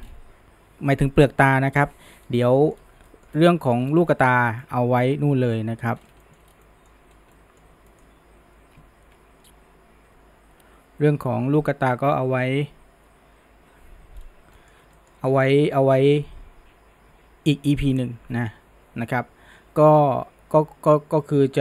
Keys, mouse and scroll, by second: 0.0-0.8 scroll down 1, 2.5 middle drag, 2.8-3.1 scroll down 1, 3.1-3.8 shift+middle drag, 3.8-4.2 scroll up 1, 4.2-4.5 shift+middle drag, 4.5 scroll down 1, 4.6-6.0 middle drag, 6.0 scroll up 1, 6.2 shift+middle drag, 6.5 scroll down 1, 6.7-7.1 middle drag, 7.1 scroll up 1, 7.4-11.0 middle drag, 14.2-14.6 scroll down 1, 14.6-18.4 middle drag.